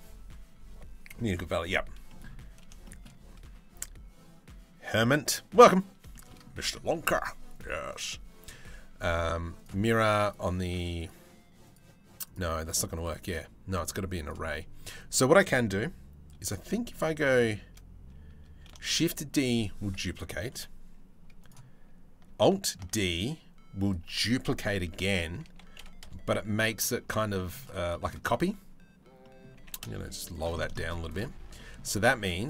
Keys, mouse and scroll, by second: 1.7 middle click, 2.5 shift+middle click, 5.7-6.1 shift+middle drag, 6.2 middle click, 7.2 click, 7.6-9.3 drag, 9.8 click, 10.6 click, 11.3 click, 11.9 click, 12.3 click, 12.6 click, 12.8 click, 13.9-16.5 drag, 18.5 shift+d, 20.2 Delete, 22.4 alt+d, 24.3 r, 26.4 middle click, 27.0 shift+middle click, 27.5 shift+middle click, 28.8 middle click, 29.2 g, 30.4 shift+middle click, 31.0 Tab, 31.2 middle click, 31.8 Tab, 32.1 click.